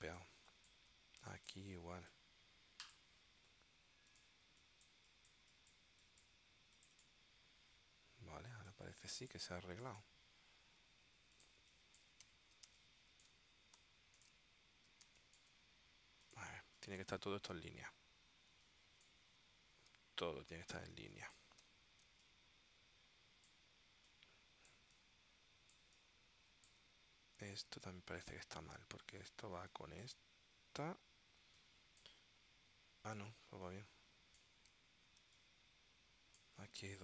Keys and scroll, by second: 4.5 space, 8.9 space, 11.7 space, 12.8 space, 13.9 w, 15.2 space, 16.7 space, 18.6 space, 21.1 space, 21.8 w, 22.2 space, 29.7 space, 31.5 space, 33.6 space, 35.3 space.